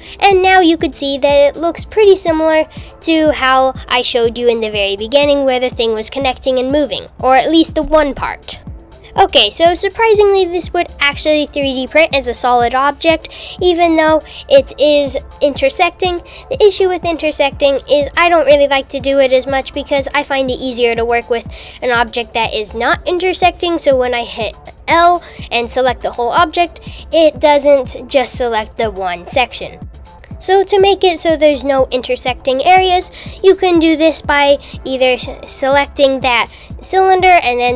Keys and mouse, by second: 1.0 g, 5.1 Tab, 8.0 Tab, 15.4 super+r, 18.8 g, 21.7 super+z, 21.9 super+z, 23.5 g, 29.9 super+r, 31.6 super+r, 34.3 click, 35.5 click.